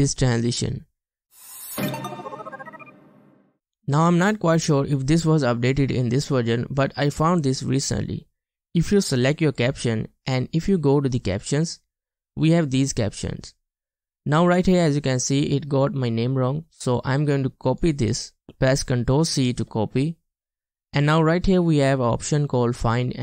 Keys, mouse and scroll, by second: 0.5 space, 18.1 right click, 19.5 ctrl+c, 19.6 typing.